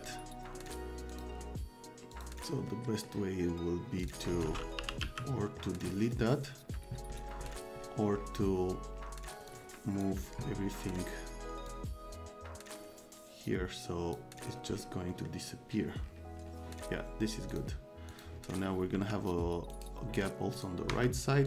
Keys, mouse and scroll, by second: 0.7 click, 1.1 click, 2.1 click, 2.7 right click, 4.0 click, 4.4 click, 4.5-5.5 typing, 5.4 click, 5.9 click, 9.5 click, 11.7-14.1 drag, 15.1 middle click, 17.5 click, 18.1 click, 18.9 c, 19.7 right click, 20.6 click, 20.9 F3.